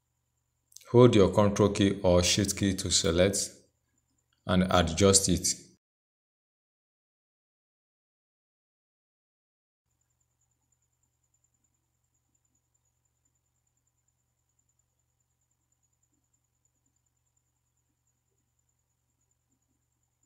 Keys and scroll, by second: 12.4 ctrl+c.